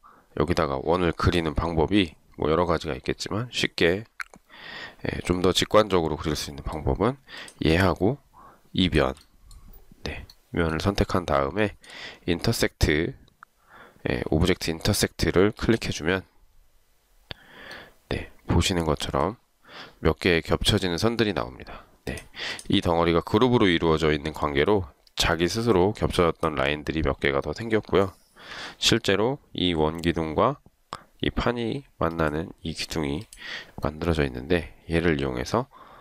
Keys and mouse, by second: 8.9 shift+click, 11.8 shift+right click, 28.6 Delete.